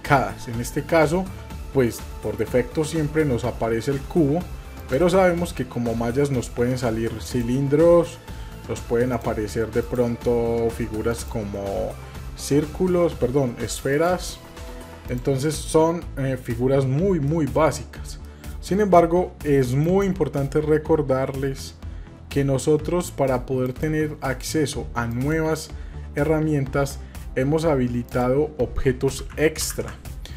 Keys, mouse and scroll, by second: 4.8-7.4 drag, 9.8-14.0 drag, 17.3 shift+middle click, 18.2 middle click, 19.8-22.9 drag, 23.6-25.5 drag.